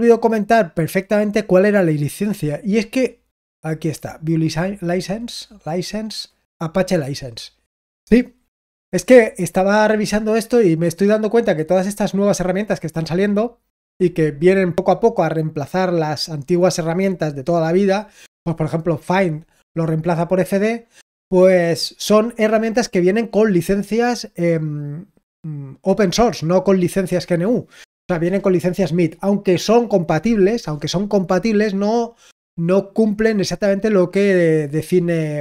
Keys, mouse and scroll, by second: 3.9 click, 4.7 click, 6.3-7.7 scroll down 1, 7.7 click, 9.9 click, 10.7 click, 12.6 click, 13.4-35.4 drag.